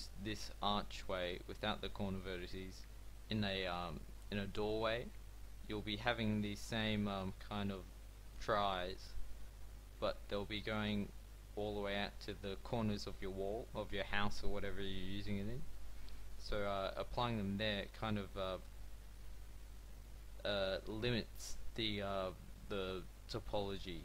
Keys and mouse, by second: 0.7 f, 6.3 f, 9.2 f, 12.3 f, 13.1 a, 19.5-24.0 middle drag.